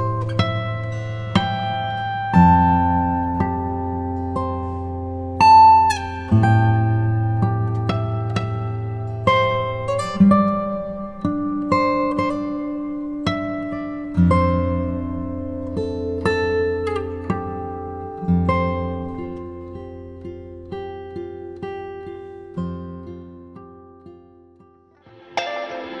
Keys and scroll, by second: 11.7 shift+super+l, 15.0 b, 15.9 ], 17.5 g, 18.1 shift+g, 19.9 shift+b, 20.9 ], 23.9 [.